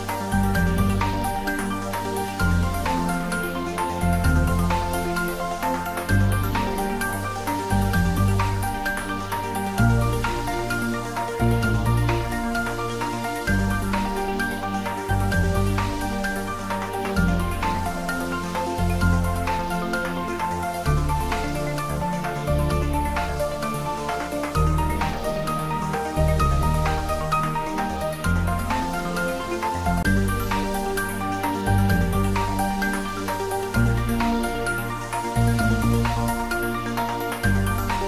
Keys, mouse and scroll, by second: 0.4 Left, 1.4 Up, 1.8 Left, 3.0 click, 8.4 scroll down 1, 9.6 middle click, 10.3 scroll down 1, 11.7 click, 13.8-14.2 scroll up 1, 14.8 typing, 17.2-21.0 drag, 27.8 click, 30.5 scroll down 1, 32.3 click, 34.1-34.5 typing, 36.6 3.